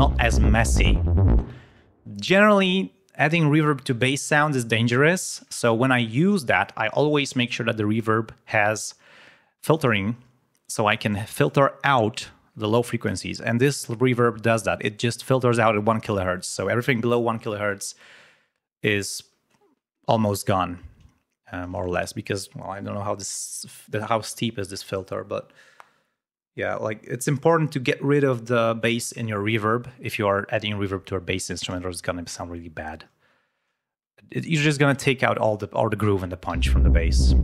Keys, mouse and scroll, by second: 1.3 space, 9.5 click, 10.8 click, 32.2 click, 36.4 l.